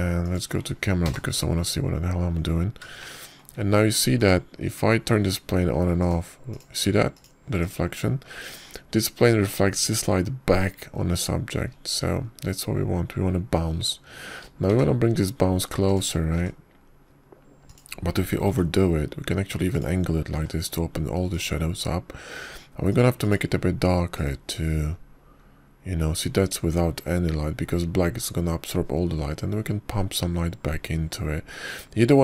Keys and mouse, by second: 0.0 g, 2.1 click, 2.9 ctrl+KP_0, 6.0 click, 7.9 click, 9.1 click, 13.7-14.1 middle drag, 16.5 g, 17.7 click, 18.2 g, 18.6 click, 19.5 click, 20.3 r, 22.2 g, 24.8 click, 25.1 click.